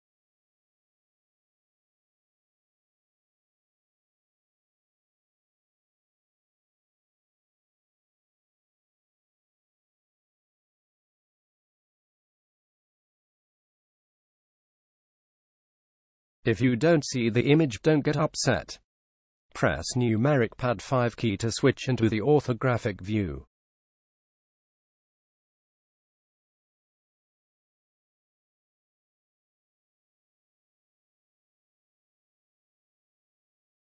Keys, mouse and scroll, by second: 0.0-1.6 drag, 4.3 click, 12.3 KP_7, 16.3-19.3 middle drag, 19.3 KP_5, 26.4-33.8 middle drag.